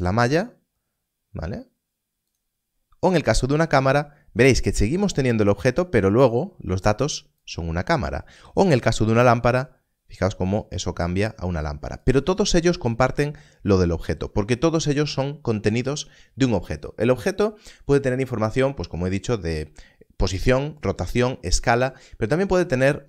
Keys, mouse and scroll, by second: 2.2 click, 7.4 click, 12.0 click.